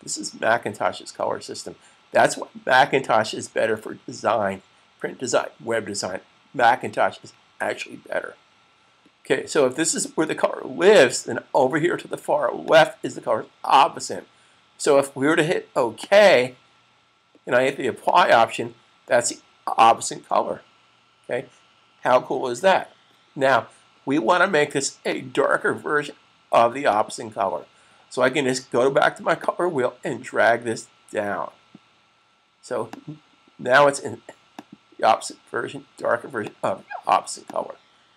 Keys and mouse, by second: 12.5 click, 15.5 click, 24.8 click, 32.6 click.